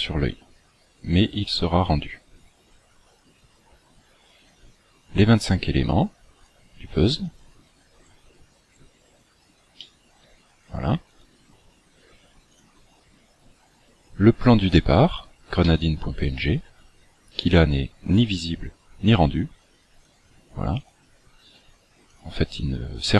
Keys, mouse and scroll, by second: 0.2-0.9 scroll down 3, 2.5-4.1 scroll down 10, 6.4 click, 7.4 click, 8.0-8.9 scroll up 11, 9.3 scroll up 2, 9.8 shift+middle click, 11.0 click, 12.4 click, 15.6 middle click, 20.0 click, 20.8 click, 22.0-23.1 click.